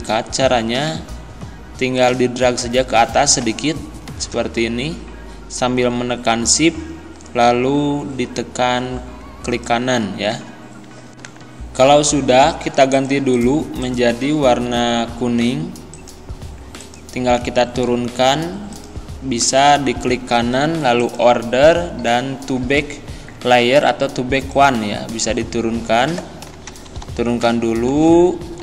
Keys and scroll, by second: 26.7 Down, 28.0 Left.